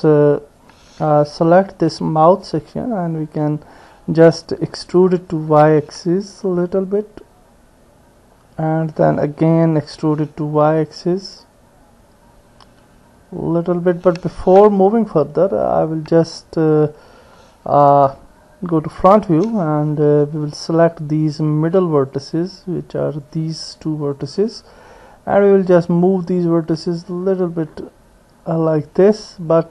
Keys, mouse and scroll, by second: 0.1 click, 2.0 alt+click, 3.2-4.2 drag, 4.2 middle click, 5.5 e, 9.9 e, 14.7 middle click, 14.8-16.8 drag, 18.4 KP_1, 22.0 click, 23.3 click, 26.0-29.5 drag.